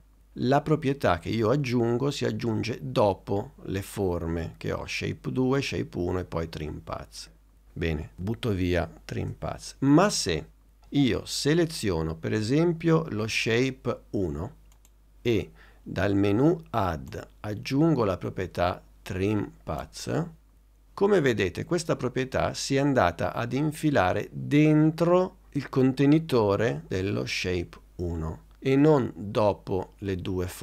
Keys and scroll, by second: 9.2 BackSpace.